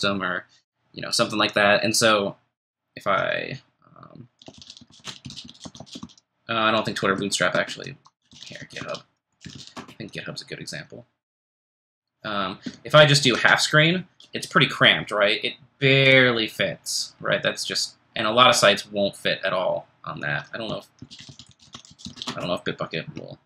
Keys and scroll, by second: 4.1-6.5 typing, 7.2 alt+BackSpace, 7.5 alt+BackSpace, 8.0-10.2 typing, 13.3 ctrl+shift+super+h, 20.4-22.7 typing.